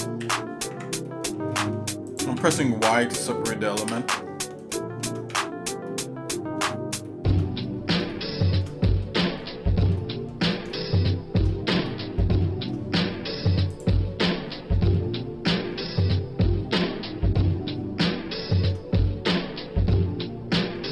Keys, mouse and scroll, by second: 0.2 y, 0.7 Tab, 1.1 middle click, 1.6 middle click, 2.1 click, 2.4 Tab, 3.9 y, 4.7 shift+middle click, 5.3 Tab, 5.9 middle click, 6.3 scroll down 1, 6.7 shift+middle click, 7.1 shift+middle click, 7.6 scroll down 2, 8.1 shift+middle click, 8.9 middle click, 9.4 scroll up 2, 10.0 shift+middle click, 10.7 shift+middle click, 11.9 middle click, 14.1 click.